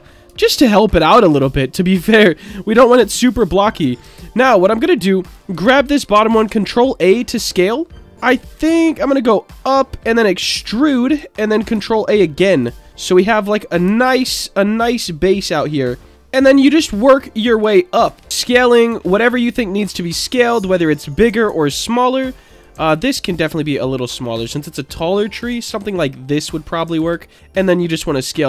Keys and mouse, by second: 0.4 shift+middle click, 1.4-1.9 shift+middle drag, 3.4 click, 4.0 Tab, 4.7 click, 6.3 ctrl+a, 9.5 ctrl+click, 10.0 e, 11.0 click, 11.7 ctrl+a, 12.5 ctrl+click, 13.3 middle click, 14.3 shift+middle click, 18.0 ctrl+a, 18.9 ctrl+a, 20.4 click, 21.5 ctrl+a, 22.1 ctrl+click, 22.5 click, 22.8 ctrl+a, 24.5 ctrl+click, 25.3 click, 25.7 ctrl+a, 26.3 ctrl+click, 26.7 click, 26.9 ctrl+a.